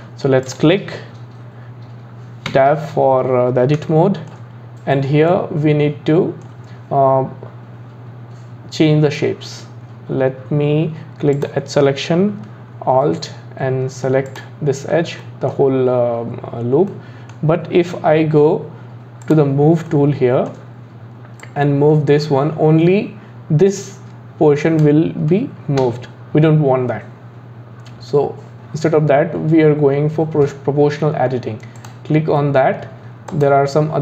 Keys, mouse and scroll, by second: 0.5 click, 2.5 Tab, 3.9 shift+middle click, 4.6-5.3 scroll up 4, 5.3-8.3 middle drag, 11.4 click, 14.3 alt+click, 15.2-16.5 middle drag, 16.5-16.9 scroll up 1, 16.9-19.2 middle drag, 19.2 click, 19.9-21.4 shift+middle drag, 21.4 click, 25.8 ctrl+z, 31.8 click, 33.3 click.